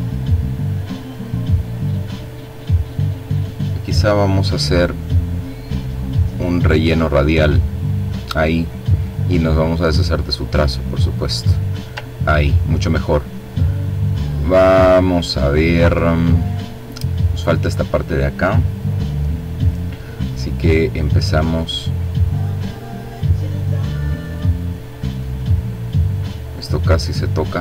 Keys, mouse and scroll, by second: 5.0 click, 5.8 click, 8.0 click, 8.8 click, 11.3-11.7 ctrl+scroll down 2, 11.9-15.3 ctrl+drag, 18.6 click, 20.4 click, 21.0 click, 22.4 click, 23.1 click, 23.8 click, 25.6 click, 26.8 click.